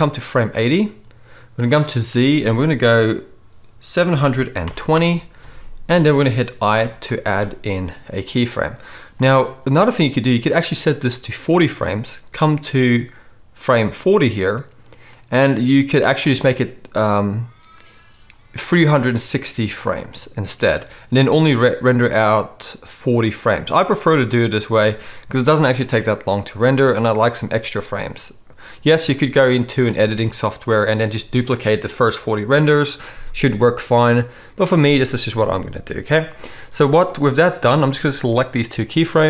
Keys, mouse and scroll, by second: 6.7 i.